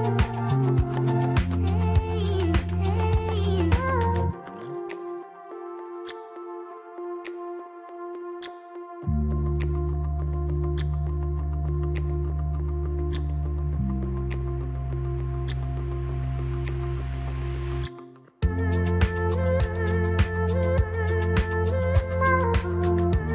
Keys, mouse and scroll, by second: 1.8 g, 5.2 Tab, 5.5-5.9 scroll down 2, 5.9-8.9 middle drag, 10.1-10.8 scroll up 1, 10.8-11.4 middle drag, 11.4 Tab, 12.8-14.4 middle drag, 14.4 KP_3, 15.1 shift+z, 15.9 click, 16.8 shift+z, 17.3-18.8 middle drag, 18.8 g, 22.1 Tab, 22.6 scroll down 3, 22.8-23.3 middle drag.